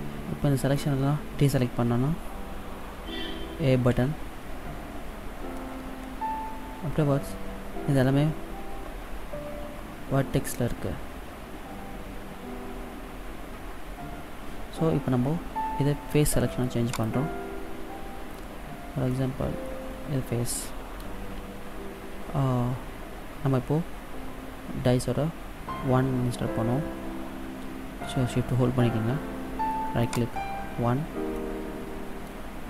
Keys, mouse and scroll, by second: 4.1 a, 17.1 click, 19.2 middle click, 30.3 shift+right click, 31.6 middle click.